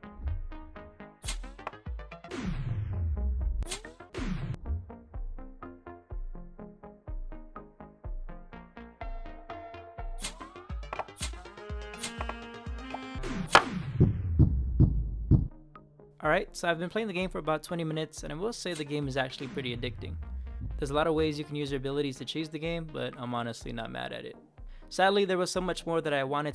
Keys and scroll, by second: 0.0 space, 1.1 Up, 2.1 Down, 3.5 Up, 4.0 Down, 4.4 space, 10.7 Left, 10.9 space, 11.1 Up, 11.1 Right, 11.5 Right, 11.8 Right, 11.8 Up, 12.8 space, 13.1 Down, 13.3 Up, 16.3 Right, 18.6 Up, 18.6-21.6 typing, 25.9-26.5 typing.